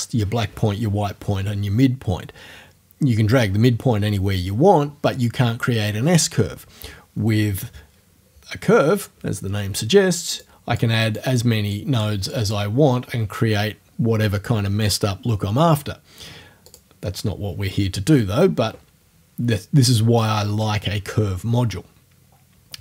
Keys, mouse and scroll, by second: 10.4 click, 11.2 click, 11.8 click, 12.3 click, 16.7 click.